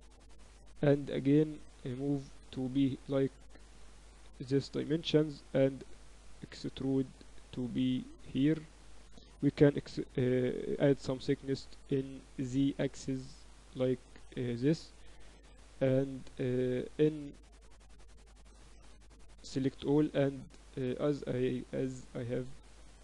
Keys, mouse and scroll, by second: 0.0-0.8 typing, 2.0-3.9 drag, 4.4-6.2 drag, 5.4 e, 9.0 a, 10.0 e, 15.3 KP_7, 17.9-19.6 drag, 19.0 ctrl+z, 19.3 a, 19.6 a, 19.9-21.9 drag.